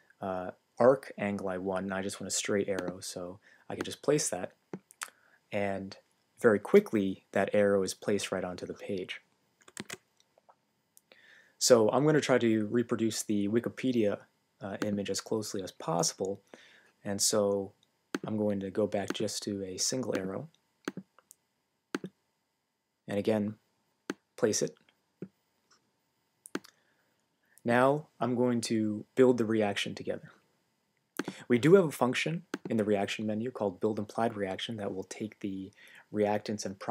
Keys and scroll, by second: 9.8 super+z.